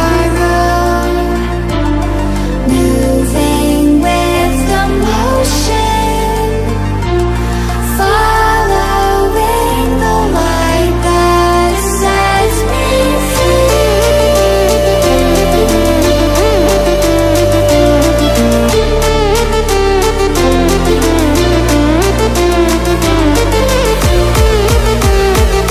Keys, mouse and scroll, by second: 1.5 click, 2.4 ctrl+alt+scroll down 1, 3.0 ctrl+alt+scroll up 1, 4.4 click, 5.4 ctrl+alt+scroll down 1, 5.7-6.3 ctrl+alt+scroll up 1, 6.7 ctrl+alt+scroll up 1, 7.8-8.5 typing, 8.7 ctrl+alt+scroll down 2, 10.4-23.7 drag, 18.1-22.5 drag.